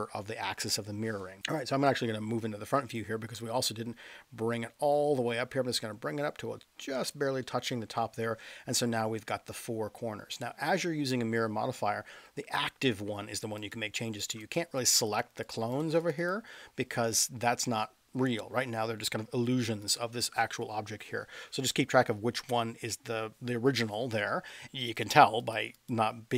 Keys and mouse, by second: 0.7 middle drag, 2.0 KP_1, 3.3-7.1 drag, 7.4-8.1 middle drag, 9.3 middle click, 13.7 click, 14.2 click, 14.5 click, 14.8 drag, 15.4 click, 16.1 click, 16.2 click, 19.8 click, 25.5 click, 25.7 click.